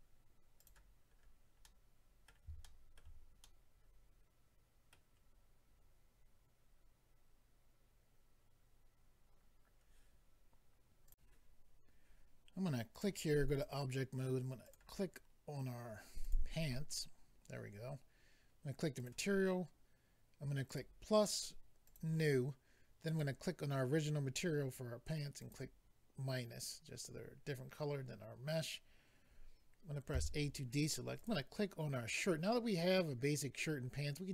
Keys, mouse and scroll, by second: 0.6 click, 0.7 click, 1.1-1.6 scroll down 2, 1.6 middle click, 1.6-1.9 scroll down 2, 2.6 shift+middle click, 3.0 middle click, 3.4 middle click, 11.1 click, 12.9 click, 13.0 click, 13.5 click, 13.6 click, 14.6 click, 14.7 click, 16.3 click, 19.0 click, 20.7 click, 21.8 click, 23.1 click, 25.4 click, 30.1 a, 31.2 click.